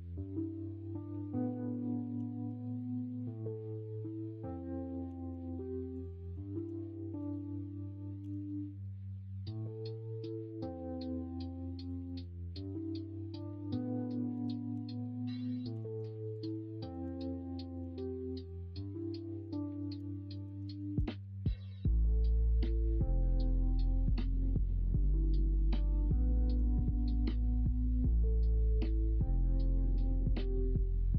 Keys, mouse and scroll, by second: 5.0 g, 6.2 middle drag, 6.5 3, 8.2 e, 12.1 middle click, 12.5 2, 13.3-13.7 middle drag, 14.2 middle click, 14.7 ctrl+b, 15.6 ctrl+z, 16.7 middle drag, 17.5 middle drag, 19.4 middle drag, 20.1 shift+middle drag, 20.9 ctrl+b, 24.9 middle click, 26.5 l, 28.9 middle click, 29.0-30.9 scroll down 2, 29.3 middle click.